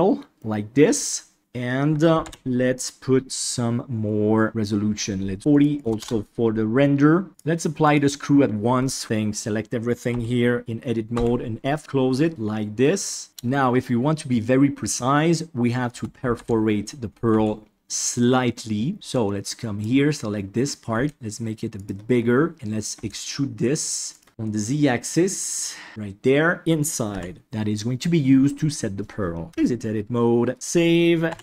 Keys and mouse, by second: 0.4-0.9 middle drag, 1.4 KP_Divide, 2.2 alt+z, 4.5 click, 5.4 click, 5.8 click, 7.4-7.9 drag, 9.0 Tab, 10.1 a, 11.1 f, 11.7-12.8 middle drag, 15.9 Tab, 16.3 alt+z, 17.3 alt+a, 18.9 b, 20.9 s, 22.9 e, 24.3 g, 25.9 middle click, 29.5 Tab, 30.5 ctrl+s.